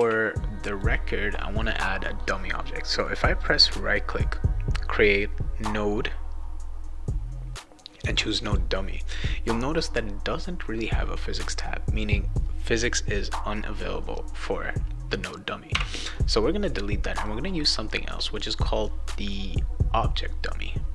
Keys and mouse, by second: 3.0 right click, 8.4 click, 9.0 click, 17.1 right click.